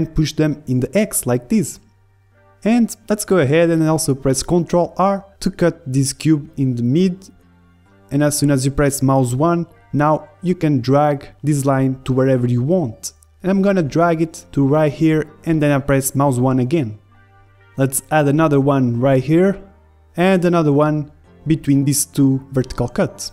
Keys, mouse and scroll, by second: 3.0 click, 3.0 KP_1, 3.5 middle click, 5.6 middle click, 6.1 click, 6.8-8.2 middle drag, 7.1 ctrl+r, 16.0-16.4 scroll up 1, 16.4-18.2 middle drag, 17.2 ctrl+r, 18.2 click, 20.7 Escape, 20.7 click, 20.7 a, 21.7 ctrl+r.